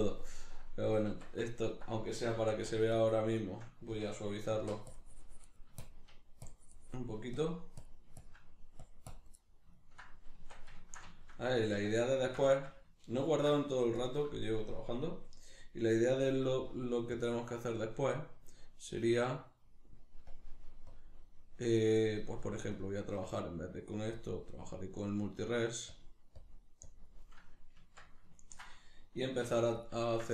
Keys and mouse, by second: 0.3 right click, 1.1 Tab, 1.5-2.9 ctrl+middle drag, 2.4 f, 2.9-9.4 shift+drag, 9.4-16.7 middle drag, 10.4 Tab, 11.5 a, 13.3 ctrl+s, 16.7-28.4 drag, 27.8 Tab, 28.4-29.9 ctrl+middle drag, 29.5 f, 29.9 click, 30.1-30.3 shift+middle drag.